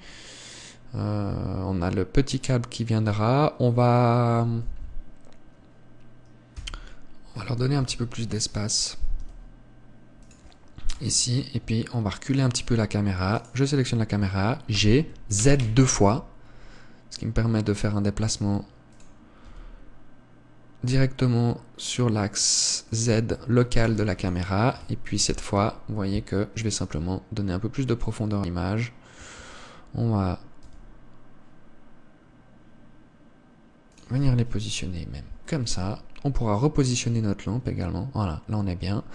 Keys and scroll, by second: 7.0 Escape, 8.3 KP_7, 9.6 g, 11.4 KP_0, 19.9 g, 24.3 ctrl+s, 29.8 Escape, 31.2 g.